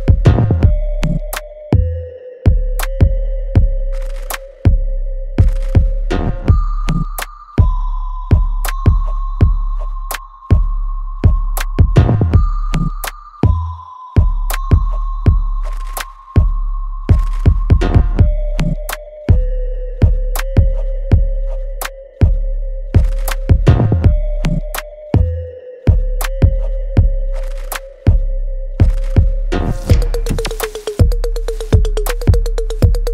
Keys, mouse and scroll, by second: 1.2-2.8 alt+right drag, 2.8-10.4 drag, 10.4 alt+right click, 11.5 alt+right click, 11.9 click, 12.3 alt+right click, 13.2 click, 13.4 click, 13.5-15.3 alt+drag, 15.3 alt+right click, 16.3 alt+click, 17.0 alt+middle click, 17.4-18.7 alt+right drag, 18.7 alt+click, 20.1 alt+click, 21.2 alt+right click, 22.2 ctrl+s, 22.6 click, 24.6 right click, 26.2 click, 26.2 click, 28.1 shift+click, 30.2 ctrl+b, 31.4 click, 32.5 ctrl+click.